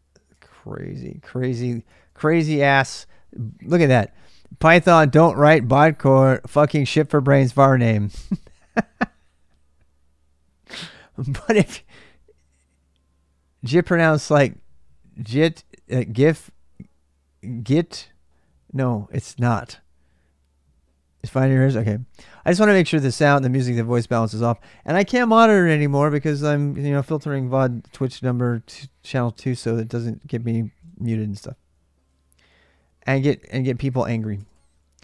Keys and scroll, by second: 0.0-2.3 typing, 29.4 alt+Tab, 31.5-31.8 BackSpace, 33.2 ctrl+[, 33.2 ctrl+j, 33.4-35.0 typing, 33.7 ctrl+[, 34.1 Return.